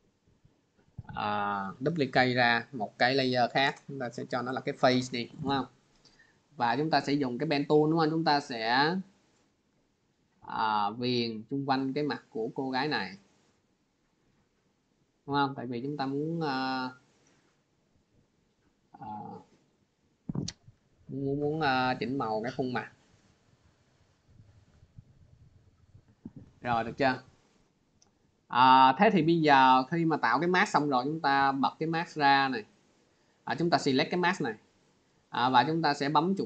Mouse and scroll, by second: 0.5 click, 2.7 click, 10.7 click, 12.2 click, 13.6 click, 15.1 click, 17.2 click, 18.8 click, 22.2 click, 24.4 click, 25.5 click, 27.7 click, 32.9 click, 35.3 right click.